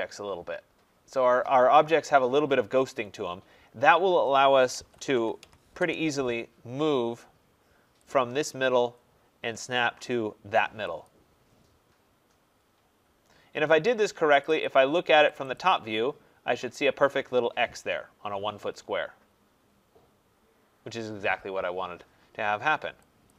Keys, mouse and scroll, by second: 2.1-2.8 scroll, 4.4-5.8 typing, 8.1 click, 8.6 scroll, 8.7-9.1 scroll up 6, 11.0 click, 11.5-13.4 scroll down 4, 14.4 click, 14.6 click, 15.3 click, 15.5 click, 15.9 middle click, 16.0 middle click, 16.1 middle click, 16.9 middle click, 23.2 click.